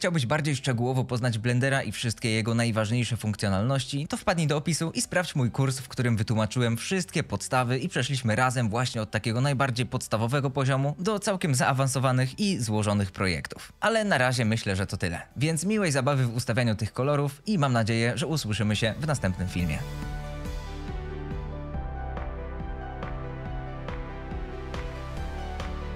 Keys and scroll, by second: 0.6-1.5 typing, 1.3 Return, 4.6 g, 5.0 g, 5.2 g, 7.1 g, 7.6 ctrl+s, 8.0 BackSpace, 8.1 Return, 8.2 BackSpace, 9.9 Tab, 10.0 r, 10.1 9, 10.1 0, 10.2 Escape, 10.6 alt+a, 11.5 d, 13.4 ctrl+r, 13.5 s, 13.9 s, 14.2 r, 14.4 g, 14.9 ctrl+z, 17.7 Return, 18.3 Return, 18.4 KP_0.